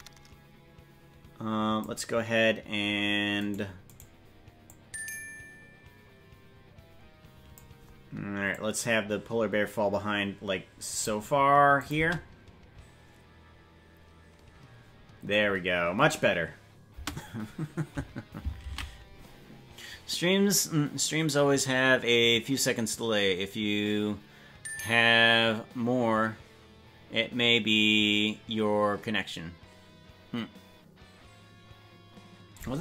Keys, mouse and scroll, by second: 3.4-4.6 right drag, 4.6-7.6 drag, 8.5-11.0 drag, 11.7 click, 12.1 space, 15.5-15.9 scroll down 4, 16.1 scroll up 2, 20.4 ctrl+s.